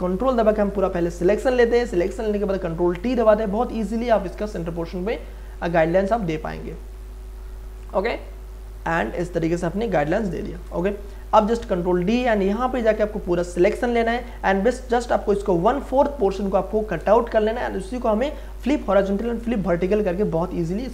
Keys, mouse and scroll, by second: 1.7 ctrl+t, 4.1-6.7 drag, 6.7-9.0 drag, 9.0-10.5 drag, 10.5 Return, 11.4 ctrl+d, 11.8 m, 12.7-20.9 drag.